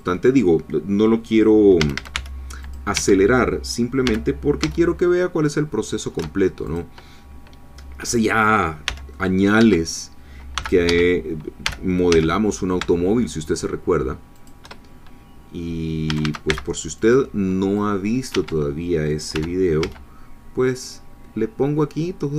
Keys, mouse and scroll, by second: 1.8 a, 2.1 c, 2.6 click, 2.9 Escape, 4.0 g, 4.6 z, 6.7-8.8 shift+drag, 8.8 c, 9.1 middle click, 9.6 Escape, 10.6 c, 10.6 click, 10.9 Escape, 11.6 g, 12.1 z, 14.4 shift+click, 16.1 a, 16.5 c, 17.0 click, 17.8 click, 18.3 Escape, 19.3 g, 19.8 z.